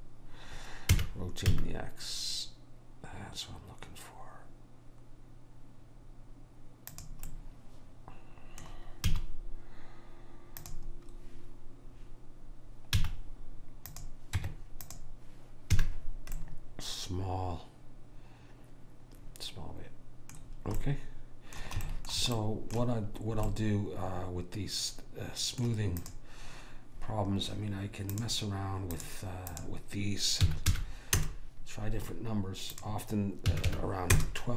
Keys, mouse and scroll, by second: 1.1 r, 7.4-8.5 middle drag, 9.3 z, 13.0 z, 14.5 Tab, 15.9 a, 20.6-25.4 middle drag, 26.1 click, 32.9 click.